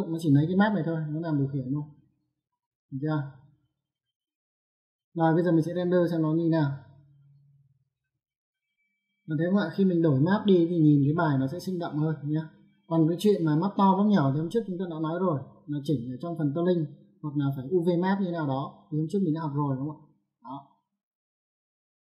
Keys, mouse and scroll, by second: 1.6 click, 3.1 click, 5.0 middle click, 7.6 click, 8.9 ctrl+1.